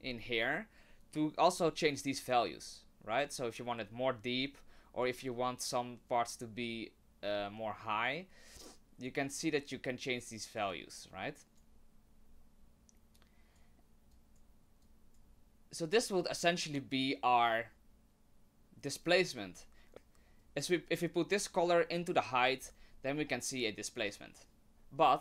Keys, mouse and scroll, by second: 1.9 click, 6.4 click, 10.7 click, 13.1 click, 14.1 click, 14.8 click, 16.0 click, 20.4 click.